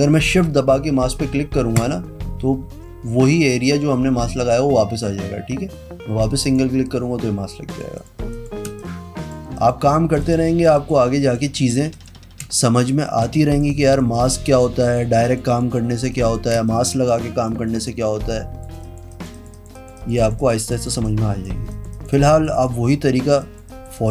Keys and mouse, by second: 1.9 click, 6.6 click, 7.8 click, 8.1 click, 8.5 click, 8.9 space, 8.9 click, 9.7 click, 10.3 shift+click, 10.9 click, 11.4 click, 11.7 click, 12.1 click, 12.6 space, 12.6 click, 13.3 click, 13.7 click, 14.3 click, 14.6 click, 14.9 click, 15.4 click, 15.6 click, 16.2 click, 16.7 space, 16.8 click, 17.6 click, 18.0 click, 18.3 space, 18.4 click, 19.0 click, 19.6 click, 19.9 click, 20.5 click, 20.7 click, 20.9 click, 21.0 space, 21.1 click, 21.8 click, 22.1 click, 22.6 click, 23.0 click, 23.6 click, 23.8 click.